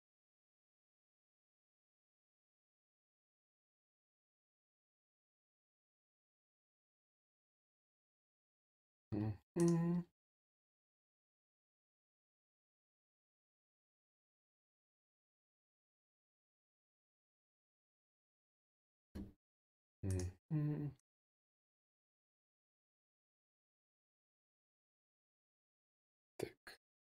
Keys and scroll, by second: 2.4 e, 3.9 e, 6.6-7.6 typing.